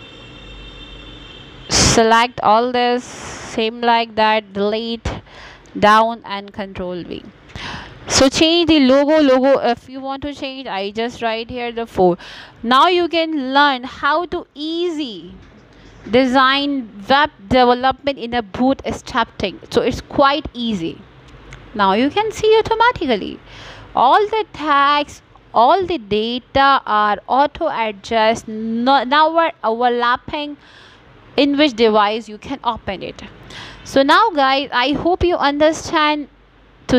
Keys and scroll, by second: 1.0 4.